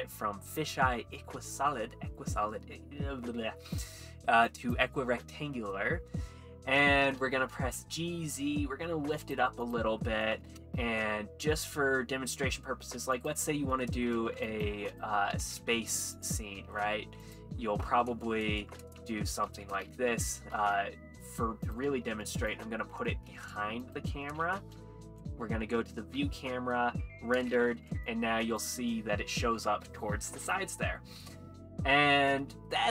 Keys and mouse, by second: 7.8 g, 7.8 z, 9.2 click, 9.6 click, 10.1 middle drag, 11.0 shift+a, 14.1 middle click, 15.5 g, 16.2 click, 16.2 y, 17.3 s, 20.1 ctrl+3, 21.1 g, 21.1 y, 21.1 u, 21.7 click, 22.5 click, 22.5 s, 23.3 g, 23.8 click, 23.8 x, 25.2 `, 26.4 z, 27.7 ctrl+b, 28.1 click, 32.2 middle drag.